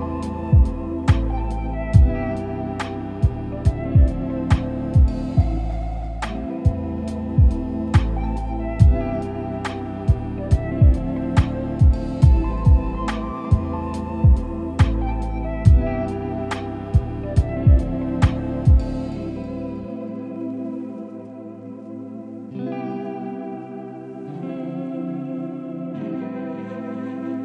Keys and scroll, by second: 23.1 ctrl+z.